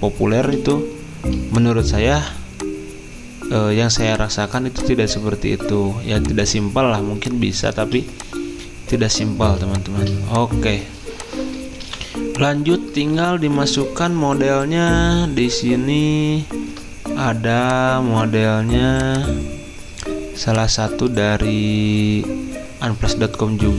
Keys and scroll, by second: 0.4 z, 2.7-3.5 typing, 7.8 z, 10.9 v, 16.5 alt+Tab.